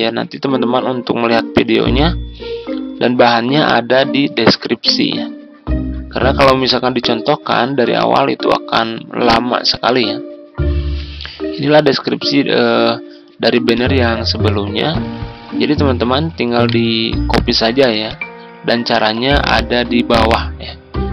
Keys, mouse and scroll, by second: 10.0-16.3 drag, 16.6 right click, 18.0 click.